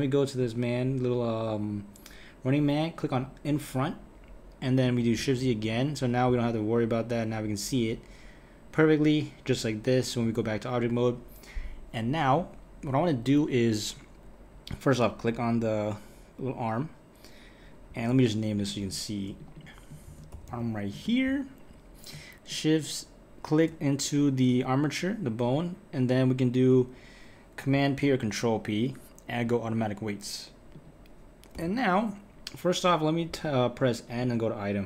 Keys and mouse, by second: 3.1 click, 5.2 shift+z, 5.6 click, 10.2 KP_1, 15.2 click, 18.6 click, 19.4 click, 19.6-22.6 drag, 28.0 p, 30.7 click, 31.5 n, 34.2 click.